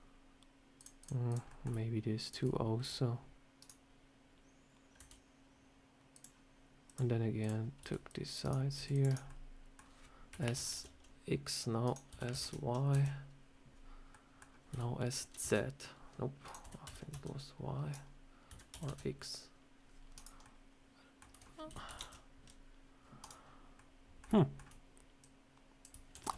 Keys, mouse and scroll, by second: 1.2 click, 1.4 middle click, 2.1 shift+click, 2.7 s, 4.9 s, 6.8 click, 7.3 click, 7.7 c, 8.6 c, 9.2 middle click, 10.2 s, 12.0 s, 14.0 middle click, 14.3 scroll down 1, 14.6 s, 16.5 s, 18.4 s, 20.3 middle click, 21.3 scroll down 1, 21.6 s, 23.7 middle click, 24.3 shift+middle click, 25.1 click, 26.0 ctrl+z.